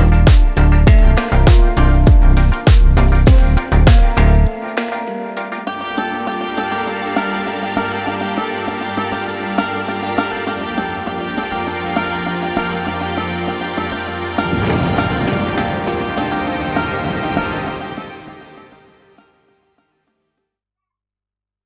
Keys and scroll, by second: 18.2 KP_7.